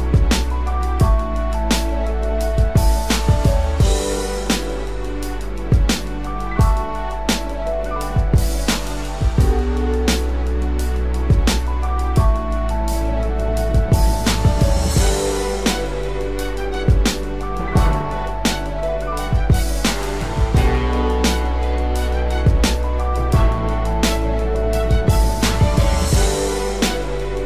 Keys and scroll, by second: 6.2 ctrl+z, 12.6 ctrl+-, 13.8 ctrl+=, 14.9 ctrl+=.